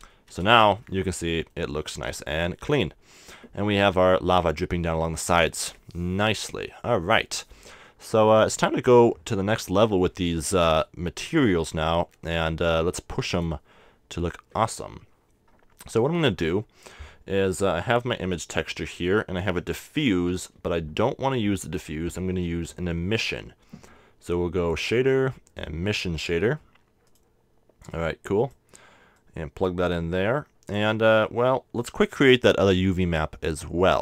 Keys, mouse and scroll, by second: 0.0-1.2 drag, 0.0 a, 0.4 Tab, 1.2-3.4 middle drag, 4.6 KP_0, 6.7-10.1 middle drag, 10.1-12.1 drag, 12.3-14.1 drag, 17.9-23.1 drag, 20.3 x, 22.2 shift+a, 27.2-30.9 drag.